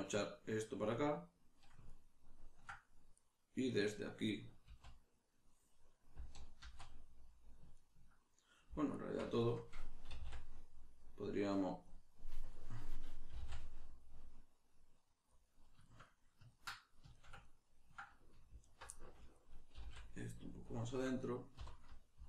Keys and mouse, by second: 0.9 click, 1.9-3.1 ctrl+middle drag, 3.1 right click, 3.7 right click, 4.7 z, 7.8 ctrl+right click, 8.9 alt+right click, 9.4-11.8 shift+middle drag, 10.0 e, 11.8 click, 13.3 g, 15.5 click, 15.9-18.6 shift+middle drag, 18.6 alt+right click, 18.9-20.8 middle drag, 19.7 g, 20.8 click, 21.6 3.